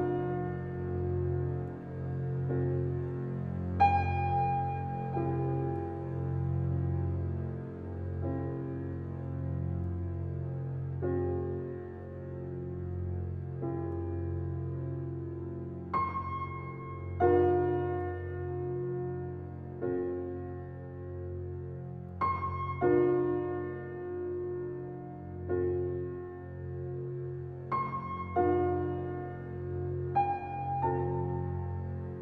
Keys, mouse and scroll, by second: 0.2-0.7 scroll up 3, 0.7-1.5 shift+middle drag, 1.5 click, 2.6-4.4 drag, 8.9 click, 10.2 shift+click, 12.0 shift+click, 12.8 shift+click, 15.6 click, 16.4 scroll down 2, 17.0-17.4 shift+middle drag, 17.4 click, 18.8 shift+click, 19.6 shift+click, 20.3 shift+click, 20.9 ctrl+click, 21.9 shift+click, 26.4 click, 26.6 click, 27.7-28.1 scroll down 2, 28.1 shift+middle click, 28.7 click, 29.3-29.7 scroll down 6, 30.4-32.2 shift+middle drag.